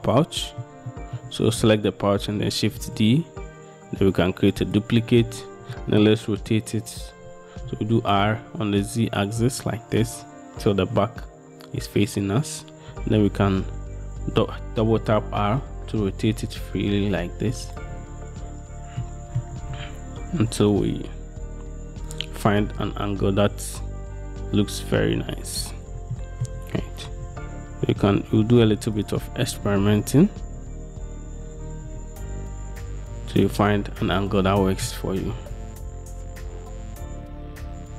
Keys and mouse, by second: 0.4-0.8 shift+middle drag, 1.0 shift+middle click, 2.9 shift+d, 4.8-5.4 drag, 5.9 drag, 7.8 r, 8.4 z, 13.6 r, 13.8 r, 19.2-19.5 middle drag, 19.7 r, 19.9 r, 22.6 r, 22.8 r, 26.3 shift+middle click, 27.2 r, 27.4 r, 29.6-32.0 typing, 33.6-35.0 drag, 35.5 r, 35.7 r.